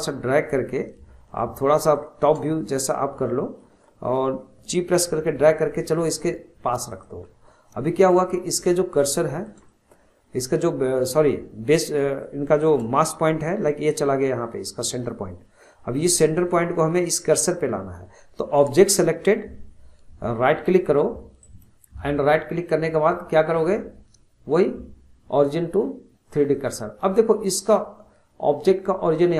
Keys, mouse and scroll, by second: 1.3 alt+middle click, 2.7-4.9 shift+middle drag, 4.9 g, 7.2-7.6 scroll down 1, 7.6-8.3 middle drag, 8.3-9.0 scroll up 1, 9.0-15.3 shift+middle drag, 21.4-29.3 right drag.